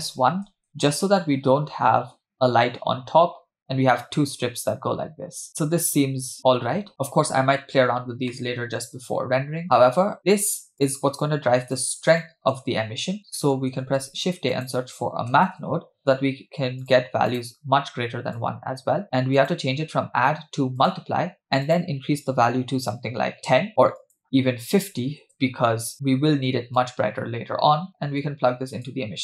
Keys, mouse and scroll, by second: 8.3 middle click, 10.7 click, 11.3 click, 12.2 middle click, 13.2 scroll down 2, 13.4 middle click, 13.9 shift+a, 18.4-19.0 drag, 19.4-21.0 drag, 21.4 scroll up 2, 21.7-23.7 drag, 24.0-25.2 drag, 26.8-28.9 drag.